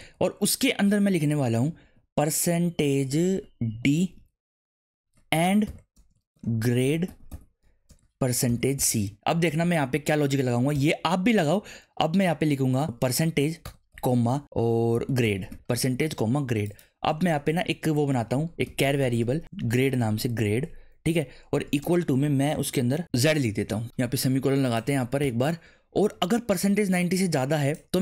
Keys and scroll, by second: 3.0 shift+', 3.7 shift+5, 4.0 d, 4.6 space, 5.6-9.6 typing, 9.8 Right, 10.7 ', 12.8-16.0 typing, 17.3 Return, 17.3-21.8 typing, 23.2 shift+z, 25.4 ;.